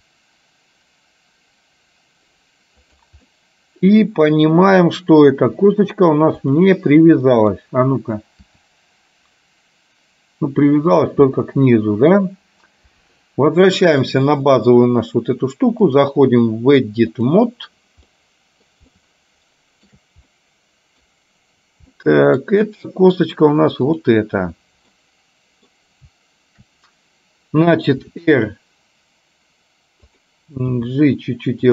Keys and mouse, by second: 0.0 r, 3.4-4.8 middle drag, 6.4 click, 7.3 middle click, 8.5 r, 11.4 middle click, 14.2 click, 16.0-17.7 drag, 18.2 middle click, 19.0 shift+middle click, 20.3 middle click, 22.0 middle click, 24.0 click, 24.9 middle click, 28.0 r, 30.8 g.